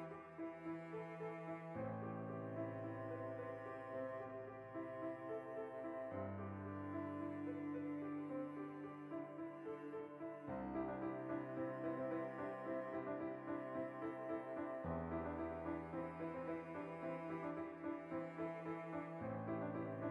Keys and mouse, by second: 0.7 g, 1.0 click, 1.1 r, 1.7 click, 2.1 g, 2.1 click, 2.2 r, 2.5 click, 2.8 g, 2.9 click, 3.0 ctrl+middle click, 3.8 right click, 4.0 l, 4.5 s, 5.4 click, 5.5-7.0 shift+middle drag, 7.0 p, 7.3 Tab, 7.4 right click, 8.2 shift+right click, 8.9 ctrl+j, 9.4 middle click, 10.0 click, 10.5 click, 10.8 Tab, 11.0-13.8 middle drag, 11.3 a, 12.5 Tab, 13.8 click, 14.4 Tab, 14.6 ctrl+middle click, 15.1 ctrl+r, 15.4 right click, 15.8 ctrl+b, 16.9 right click, 17.3 click, 17.9 ctrl+b, 18.8 shift+click, 19.2 ctrl+r.